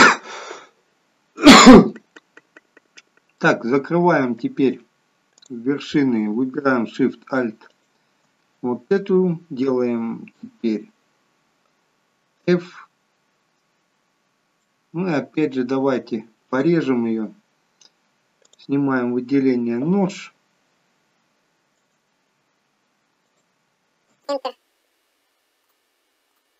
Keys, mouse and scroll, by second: 3.4 middle click, 5.4 click, 7.8 alt+shift+click, 12.5 f, 14.3 scroll up 3, 14.7 middle click, 15.6 scroll down 1, 18.5 click, 20.1 k, 24.9 k.